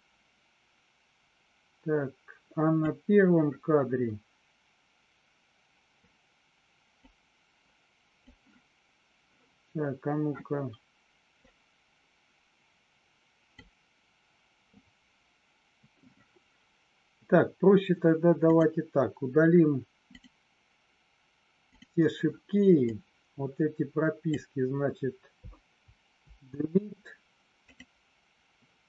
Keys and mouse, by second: 6.9-8.2 drag, 11.6-13.6 drag, 18.4 click, 22.8-24.3 drag, 26.2 Delete.